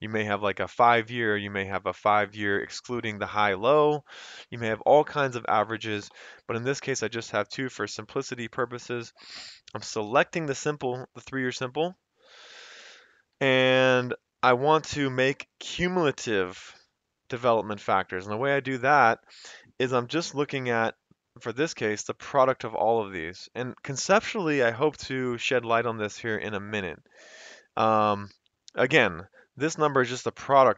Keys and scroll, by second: 10.0 F2, 11.4 Escape, 11.8 Right, 11.9 F2, 12.1 Escape, 12.3 Right, 12.5 F2, 12.7 Escape, 13.2 Right, 13.4 F2, 13.7 Escape, 13.8 Right, 14.4 Escape, 18.4 F2, 19.0 Escape, 30.0 F2, 30.5 Escape.